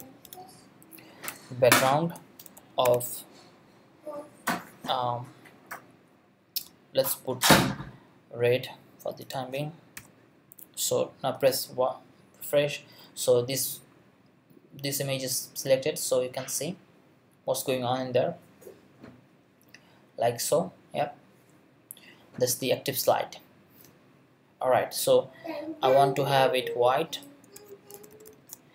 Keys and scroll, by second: 0.0-0.8 typing, 1.3 Return, 2.0 space, 2.8 shift+3, 10.0 ;, 27.9 shift+f.